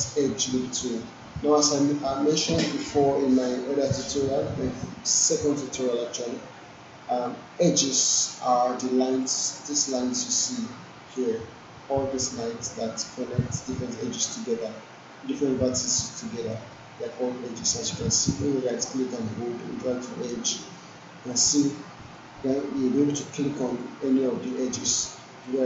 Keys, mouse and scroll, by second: 9.1 click, 16.5-20.6 right drag, 21.3 click, 25.5 right click.